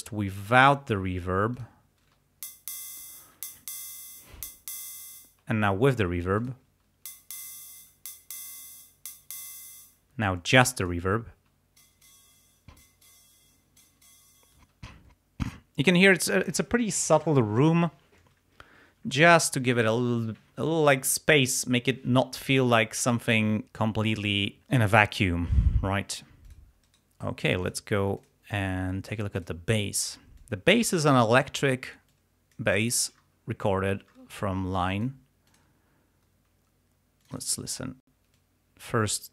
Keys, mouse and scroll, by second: 1.6 click, 2.1 space, 5.2 space, 6.5 click, 6.7 space, 10.0 space, 10.5 click, 11.4 space, 14.6 space, 26.5 click, 26.9 right click, 27.7 click, 28.2 click, 29.4 click, 30.4 click, 31.2 scroll down 2, 32.2 click, 32.9 ctrl+scroll down 2, 34.8 click, 35.5 click, 37.3 click, 38.3-39.3 drag.